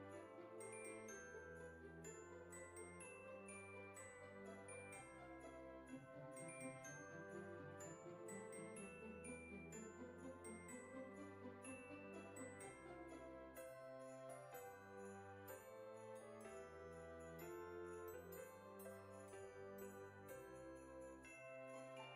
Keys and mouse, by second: 1.1 click, 4.4 click, 5.9 click, 7.2 click, 8.5 click, 10.1 click, 15.4 click, 16.5 KP_5, 19.6 click, 20.1 KP_2, 21.1 BackSpace, 21.4 KP_3.